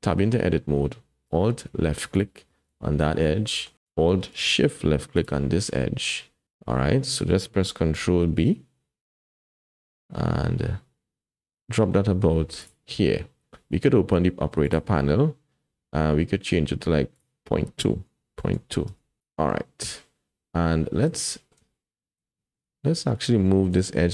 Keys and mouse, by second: 2.1 alt+click, 3.3 click, 6.0 click, 7.9 ctrl+b, 17.1-18.9 drag, 19.2 click, 21.2 shift+click, 22.3 shift+click, 23.4 shift+click.